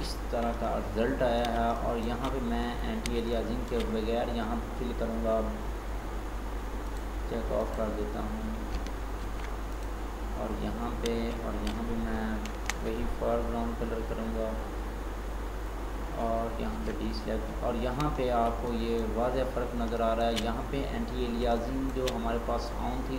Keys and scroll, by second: 9.3 ctrl+d, 12.6 alt+BackSpace, 16.8 ctrl+d.